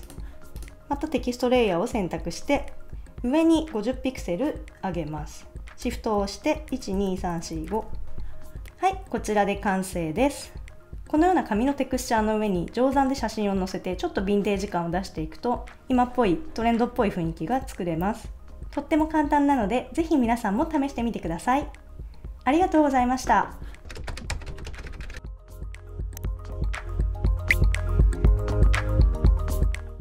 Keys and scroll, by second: 6.7 shift+Up.